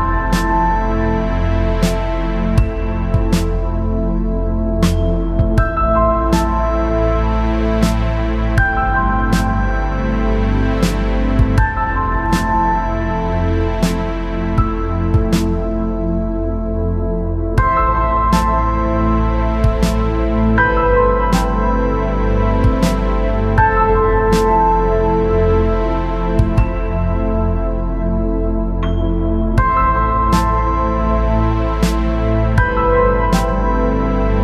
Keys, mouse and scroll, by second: 1.0-3.7 drag, 4.1 middle click, 4.7 middle click, 5.7 click, 7.0 click, 8.0 click, 8.9 click, 10.5 click, 10.8 click, 12.0 click, 12.9 click, 13.9-15.0 drag, 15.2 middle click, 17.0 KP_7, 18.0 g, 20.2 middle click, 20.6 middle click, 22.7 click, 23.8 ctrl+a, 24.0 ctrl+a, 25.0 click, 25.9 g, 26.7 ctrl+z, 27.1 Tab, 27.9 p, 28.7 Tab, 29.6 click, 30.0 click, 30.5 click, 31.0 middle click, 31.4 middle click, 32.2 shift+middle click, 32.6 middle click.